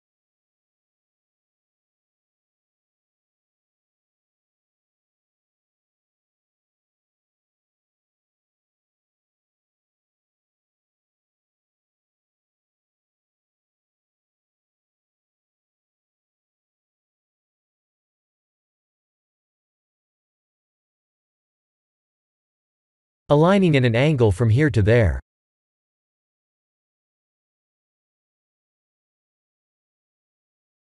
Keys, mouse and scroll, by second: 0.0 ctrl+r, 1.6 click, 2.6 shift+z, 2.9 1, 3.1 click, 3.3 b, 4.4 click, 4.6 b, 6.2 g, 7.6 click, 7.8 b, 8.3 g, 9.1 click, 9.3 b, 10.0 g, 11.2 click, 11.5 b, 12.0 g, 12.8 click, 13.1 b, 14.1 g, 15.0 click, 15.4 b, 16.1 g, 16.7 click, 16.9 b, 17.6 g, 19.7 Tab, 20.9 Tab, 21.5 click, 22.7 click, 24.4 b, 25.6 b, 29.7 click, 30.4 2.